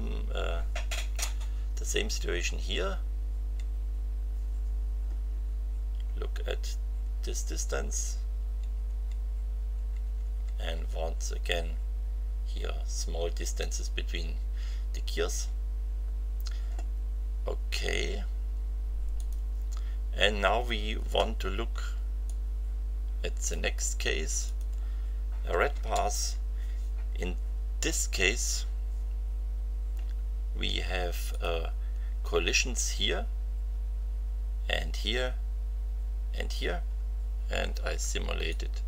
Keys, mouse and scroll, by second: 3.3 Right, 7.8 Right, 9.7 Right, 19.1 click, 22.2-23.7 drag, 24.4 click, 25.7 space, 31.3 click, 38.5-38.8 drag.